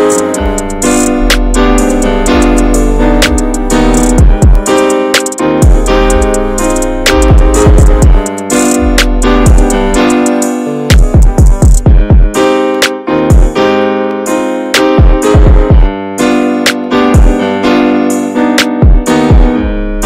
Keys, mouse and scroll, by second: 0.0 shift+middle click, 0.1 scroll up 1, 0.3-1.8 middle drag, 1.8-2.2 scroll up 2, 2.2 shift+middle click, 2.8-4.6 scroll up 5, 3.1 shift+middle click, 3.9 shift+middle click, 4.6-6.1 drag, 6.1 shift+middle click, 6.7-7.1 scroll up 1, 7.1 click, 7.9 scroll down 2, 8.1 middle click, 8.5-8.9 scroll down 3, 8.9 shift+middle click, 9.4 scroll down 1, 9.7-10.8 shift+middle drag, 10.8-11.9 scroll up 2, 11.9 click, 12.6 middle click, 13.2-13.7 scroll up 1, 13.7-15.7 drag, 15.7-16.3 scroll down 1, 16.3 scroll up 2, 16.4 drag, 16.7-18.1 shift+middle drag, 18.1 click, 18.6 alt+h, 19.2 click, 19.8 click.